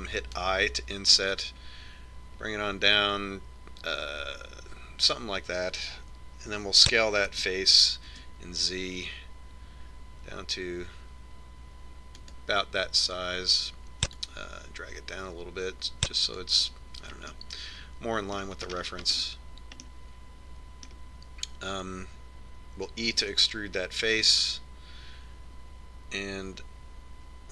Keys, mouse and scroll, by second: 4.0 i, 9.0 s, 16.0-17.8 drag, 19.1-23.5 middle drag, 25.0 e.